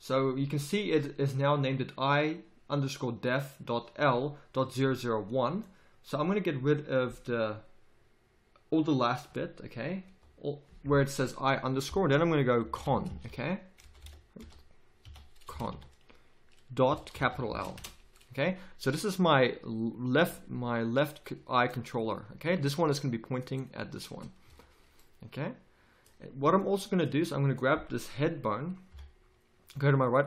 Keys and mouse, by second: 5.1-14.0 drag, 14.0 BackSpace, 20.3 g, 22.0-23.8 drag, 24.4 a, 28.9 KP_3.